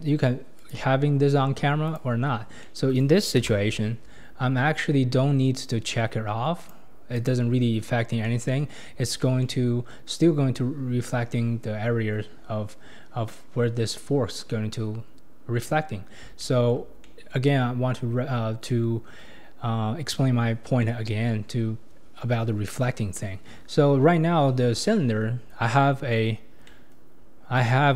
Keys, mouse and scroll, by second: 0.6 click, 1.9 click, 2.6 middle click, 3.5 KP_0, 4.4-5.3 scroll up 2, 6.6 click, 7.2 click, 7.9 scroll down 5, 8.2-8.8 middle drag, 8.8-9.4 scroll down 9, 9.4-11.8 middle drag, 11.8-13.6 scroll up 10, 14.5-16.3 scroll down 11, 16.4-18.5 shift+middle drag, 18.5-19.7 scroll up 3, 19.7-20.8 scroll up 1, 20.8-21.4 middle drag, 21.4-22.4 scroll up 6, 23.1 scroll down 3, 23.9-25.2 scroll down 9, 25.7-26.7 scroll up 15, 26.7-27.2 middle drag, 27.2-27.9 scroll up 4.